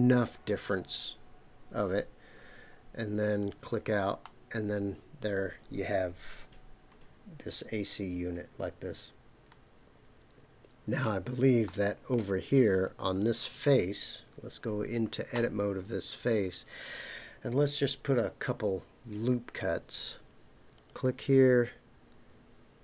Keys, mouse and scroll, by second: 3.4 click, 4.2-11.0 middle drag, 11.6-12.1 middle drag, 12.7 click, 15.3 Tab, 19.1 ctrl+r.